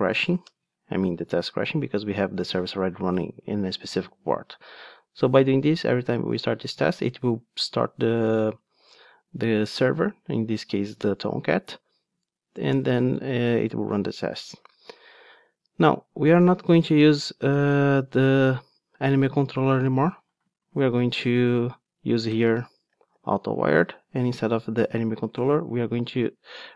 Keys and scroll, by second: 0.6 Return, 23.4 Return, 25.7 super+x.